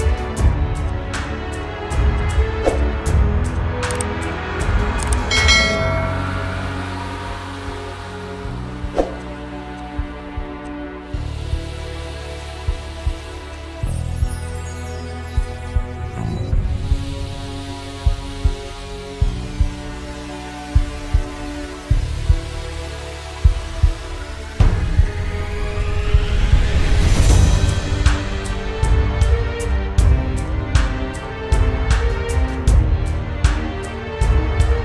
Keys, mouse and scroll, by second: 1.0 click, 9.4 click.